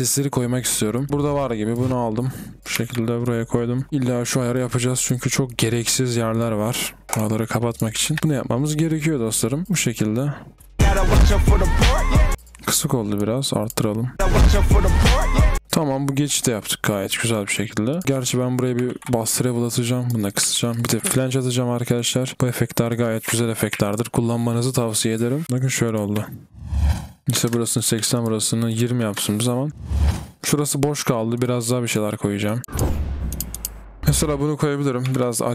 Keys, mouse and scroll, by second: 0.0 typing, 1.0 double click, 2.7-4.1 typing, 3.9 double click, 8.1 typing, 10.5 typing, 15.6 typing, 18.0 ctrl+b, 18.2-18.8 typing, 20.2 double click, 20.5 ctrl+b.